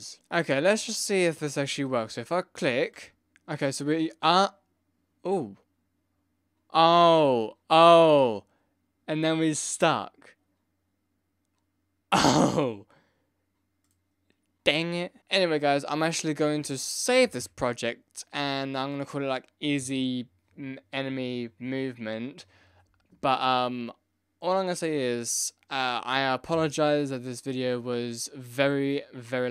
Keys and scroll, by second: 17.2 ctrl+s.